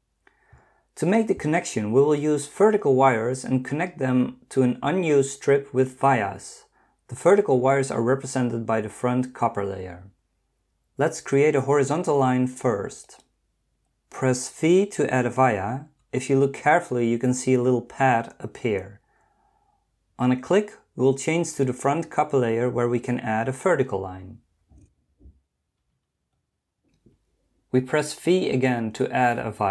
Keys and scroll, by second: 15.9 v.